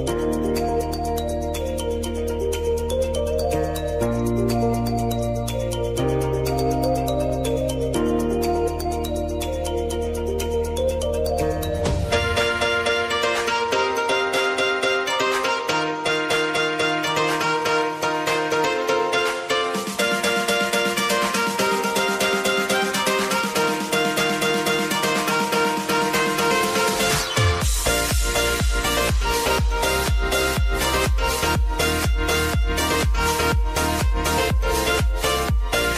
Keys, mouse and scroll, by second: 0.9 click, 3.2 s, 6.0-14.6 drag, 17.3 click, 19.8 Return, 21.0-22.9 drag, 22.9 =, 23.6 space, 25.8 click, 27.4 ctrl+d, 27.8-30.1 drag, 30.8 F4, 31.5 click, 32.9 space, 34.1-35.9 drag.